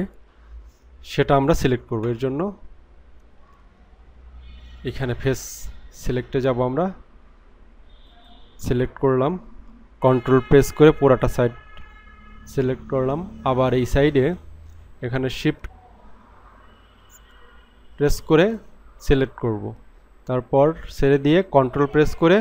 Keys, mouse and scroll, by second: 5.9 click, 8.1 click, 11.1 ctrl+click, 18.4 shift+click.